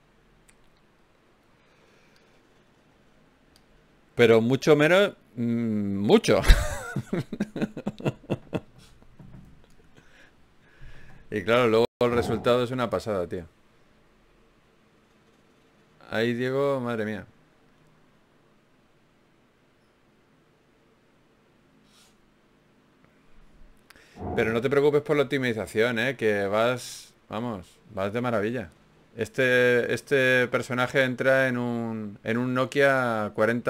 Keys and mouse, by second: 3.6 f, 4.4 ctrl+z, 6.7 click, 8.0-13.1 drag, 10.1 f, 11.5 f, 13.3 ctrl+z, 13.9 ctrl+z, 14.7 ctrl+z, 16.3 ctrl+r, 17.3 g, 19.1 ctrl+Tab, 20.2 ctrl+z, 20.5 ctrl+z, 20.7 ctrl+z, 21.0 ctrl+z, 28.7 ctrl+Tab, 30.1 click, 31.2 g.